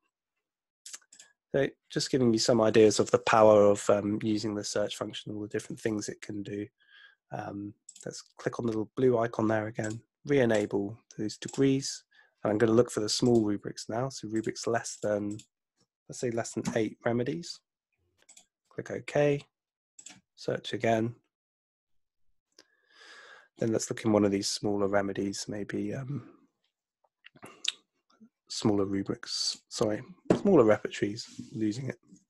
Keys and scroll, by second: 16.7 8.